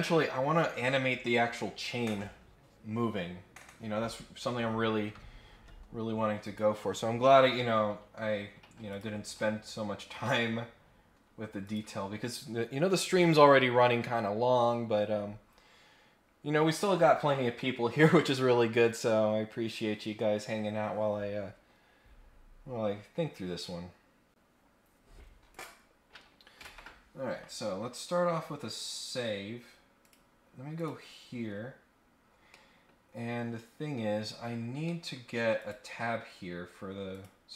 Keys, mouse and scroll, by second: 6.4 click, 8.9 click, 10.2 middle click, 11.6 click, 25.5 click, 27.9-28.3 scroll down 2, 28.3 scroll up 1, 30.0 click, 30.7 click, 32.3 scroll down 1, 32.5 middle click, 34.2-34.7 scroll up 3, 34.8 middle click, 35.5 click, 36.3 scroll down 2, 37.1 click.